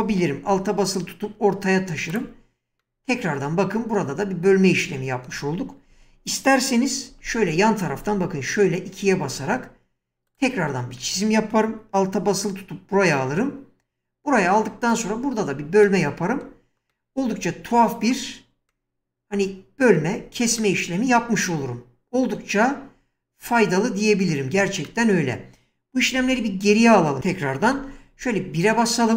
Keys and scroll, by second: 5.9 1, 7.3-7.9 typing, 26.2 ctrl+z, 27.7 1.